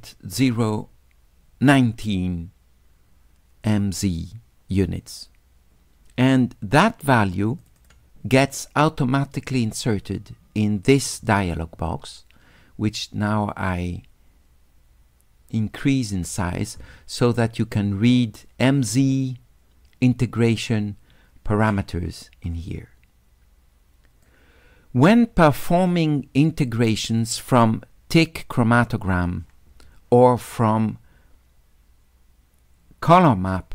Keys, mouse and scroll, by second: 7.6 click, 7.8 click, 11.0 click, 13.0-16.1 drag, 24.3-26.7 drag, 27.2 click.